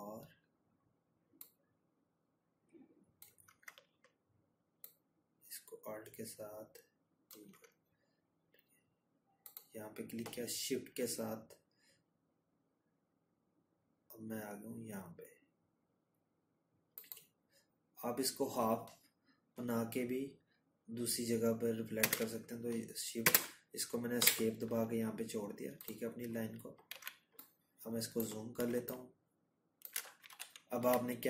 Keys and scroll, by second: 20.3 Escape, 23.0 z, 28.6 ctrl+-.